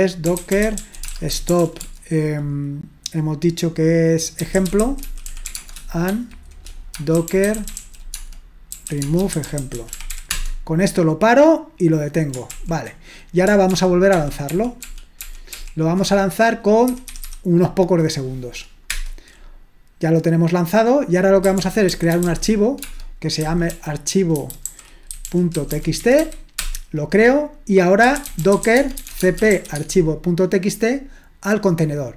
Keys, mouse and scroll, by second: 0.1-2.1 typing, 4.3-10.6 typing, 12.5 ctrl+l, 13.7 ctrl+p, 14.1 ctrl+p, 14.5 ctrl+p, 14.8 ctrl+p, 16.9-17.2 typing, 18.9 Return, 21.3-26.7 typing, 27.8-30.0 typing.